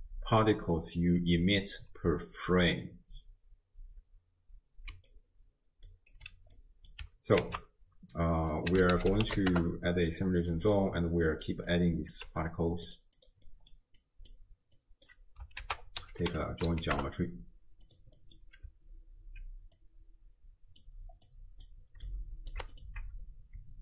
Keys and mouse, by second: 4.9 d, 5.1-6.1 drag, 6.6 middle click, 6.6 d, 7.4 ctrl+a, 10.7-11.3 drag, 11.8-12.1 drag, 12.3 g, 13.2 click, 13.5 middle click, 14.0 click, 14.8 click, 15.6 ctrl+a, 18.2 middle click, 19.8-20.8 drag, 21.3 click, 22.1 click, 22.7 alt+shift+click.